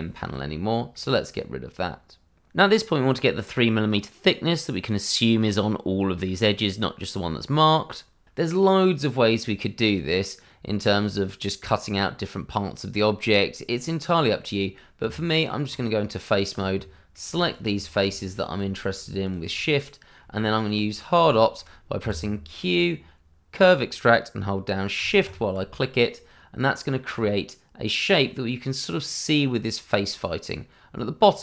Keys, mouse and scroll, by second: 0.5 middle click, 3.9 middle click, 7.3 middle click, 14.1 middle click, 15.0 Tab, 16.5 click, 16.7 middle click, 17.4 shift+click, 17.7 middle click, 18.3 shift+click, 18.6 shift+middle click, 19.2 shift+click, 19.3 click, 19.7 middle click, 20.5 shift+middle click, 21.1 middle click, 21.5 shift+middle click, 22.0 q, 25.2 shift+click, 25.3 click.